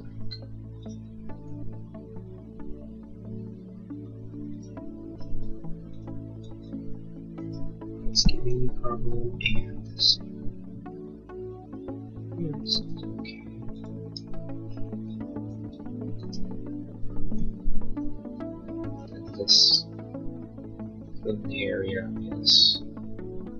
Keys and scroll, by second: 1.3 Escape, 8.4 l, 14.1 e, 17.9 l.